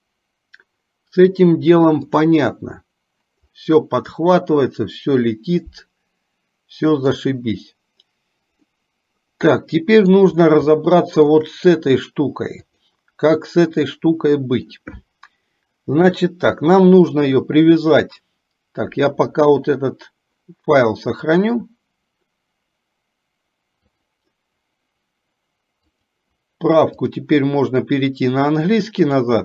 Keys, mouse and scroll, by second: 2.2 click, 4.4-7.4 middle drag, 8.9-10.4 middle drag, 11.0 shift+middle click, 12.7 click, 14.0 middle click, 26.0-27.6 drag.